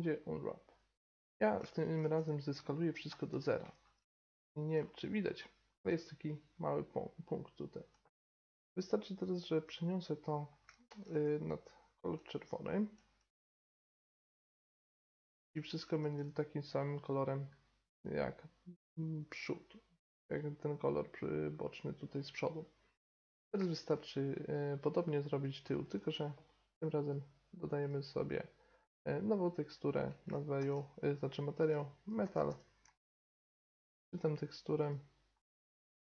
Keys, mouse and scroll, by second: 0.0 u, 1.8 middle drag, 2.3 s, 3.7-4.2 middle drag, 5.8 g, 8.9-10.9 drag, 11.2 g, 12.3 click, 13.7 g, 15.5 Tab, 16.0 drag, 19.2-22.8 middle drag, 23.2-26.3 middle drag, 26.8-36.0 drag.